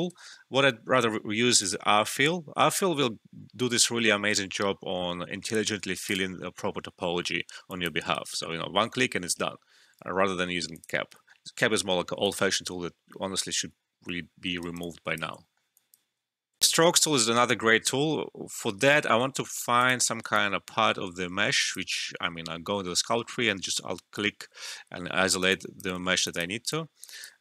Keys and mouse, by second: 0.1 ctrl+z, 1.6 click, 6.0 click, 8.1 alt+right click, 8.7 ctrl+z, 10.7 click, 14.2 alt+middle click, 14.5 alt+right click, 14.8 alt+click, 15.4 alt+middle click, 15.7 alt+click, 16.6 alt+F12, 19.8-25.2 drag, 25.2 alt+right click, 25.4 alt+click, 26.0 alt+middle click, 26.2-27.4 alt+drag.